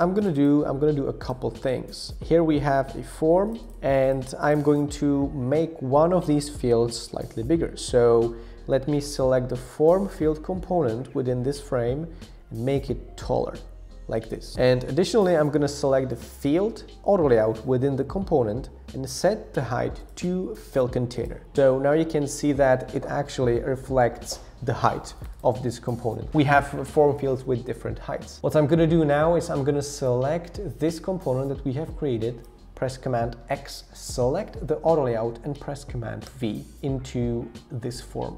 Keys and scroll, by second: 33.3 super+x, 36.3 super+v.